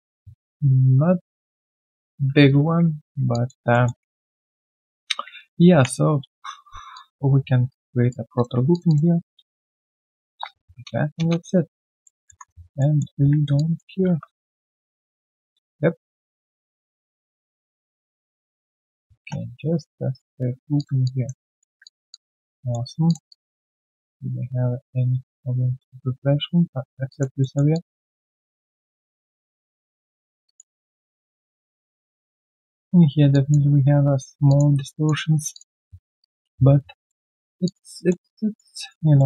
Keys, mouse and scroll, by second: 3.3 alt+click, 3.7 alt+middle click, 4.2 ctrl+z, 5.6 ctrl+Delete, 6.9 alt+click, 7.6 right click, 8.7 shift+click, 8.8 shift+double click, 10.2 ctrl+alt+q, 12.0 alt+middle click, 12.7 alt+middle click, 13.1 typing, 13.5 alt+click, 13.8 alt+click, 18.9-19.6 typing, 19.8 right click, 20.4-20.8 scroll down 2, 20.9 q, 21.0 alt+click, 21.4 alt+right click, 22.1 alt+click, 22.6 alt+middle click, 23.2 alt+click, 27.0 alt+click, 27.4 alt+middle click, 27.7 alt+click, 28.5 alt+middle click, 28.8 alt+click, 30.0 alt+middle click, 30.2 alt+right click, 30.4 alt+click, 30.7 alt+middle click, 31.1 alt+click, 32.2 alt+right click, 32.4 alt+click, 34.4 alt+click, 34.7 alt+right click, 34.9 alt+click, 35.8-36.2 alt+scroll down 1, 36.2 alt+click, 37.0 alt+middle click, 37.3 alt+right click, 37.6 alt+click, 37.9 alt+middle click, 38.2 alt+click, 38.8 alt+right click, 39.1 alt+middle click.